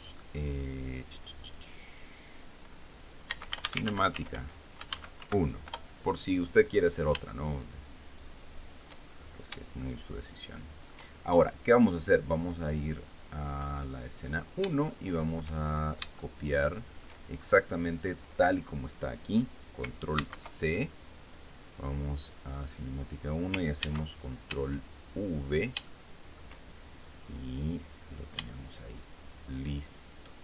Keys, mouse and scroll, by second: 0.5 click, 3.7-6.4 typing, 6.9 Return, 8.0-9.8 shift+middle drag, 9.8-10.5 shift+scroll up 4, 10.5-12.1 shift+middle drag, 13.3 click, 14.9 click, 15.6 shift+middle click, 16.4-16.8 shift+scroll up 4, 16.9-17.9 shift+middle drag, 18.5 right click, 20.9 ctrl+c, 22.4 right click, 23.2 right click, 24.5 ctrl+v, 26.0-26.3 scroll down 2, 26.5 shift+middle click, 28.1 click.